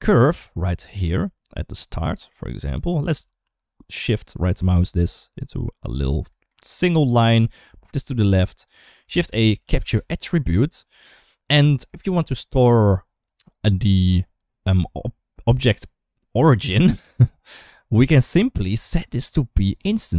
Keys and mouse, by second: 1.1-2.4 drag, 3.9 shift+right click, 4.7 g, 6.7-7.3 drag, 7.4 g, 8.5 click, 8.9 shift+a, 11.5 shift+middle click, 18.8-20.0 drag.